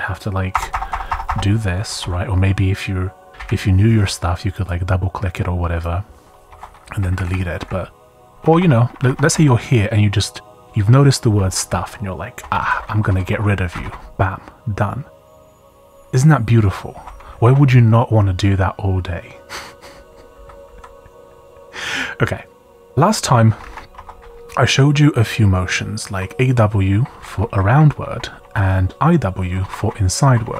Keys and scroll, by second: 0.5-2.0 typing, 1.9 Escape, 3.3 i, 6.5 Escape, 7.0 Left, 7.2 Left, 7.3 Left, 7.6 Left, 8.3-9.2 typing, 9.3 Up, 12.3-14.3 typing, 16.9 Escape, 17.0 u, 20.0-21.2 typing, 22.5 j, 22.8 Escape, 23.6 shift+i, 23.9 Escape, 24.8-25.7 typing, 27.7 typing.